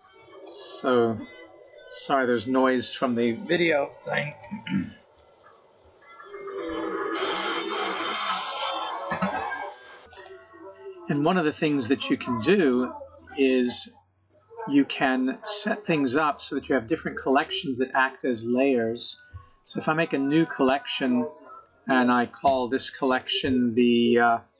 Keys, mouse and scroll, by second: 11.3 middle click, 14.3-15.3 scroll up 1, 16.7 right click, 22.4 click, 22.6 click.